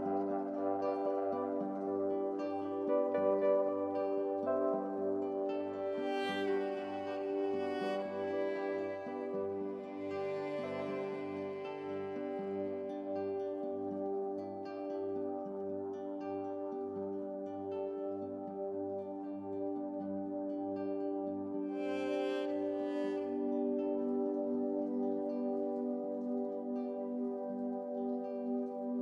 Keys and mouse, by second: 0.6 n, 1.0 z, 1.6-3.3 drag, 2.2-4.5 typing, 6.5 Tab, 6.7 click, 6.8 g, 7.2 Tab, 7.5 Tab, 7.5 middle click, 7.8 ctrl+z, 8.8 ctrl+z, 8.9 2, 9.0 click, 10.0 middle click, 10.2 Tab, 10.3 Tab, 10.5-12.0 drag, 10.8 Tab, 10.8 g, 11.6 g, 12.7 Tab, 12.8 KP_Divide, 12.9 alt+a, 13.0 KP_Divide, 13.2 alt+h, 13.4 alt+a, 14.2-16.1 drag, 14.5-18.1 typing, 16.1 ctrl+z, 16.2 click, 16.8 middle click, 17.8 middle click, 17.9 alt+a, 18.1 click, 18.3 alt+a, 18.7-20.2 middle drag, 19.0 alt+a, 20.2 alt+a, 20.2-22.2 typing, 21.3 middle click, 22.2 click, 22.5 alt+a, 22.5 middle click, 22.7 click, 23.2 KP_3, 23.2 g, 23.4 alt+a, 23.4 middle click, 24.1 click, 24.2-25.4 typing.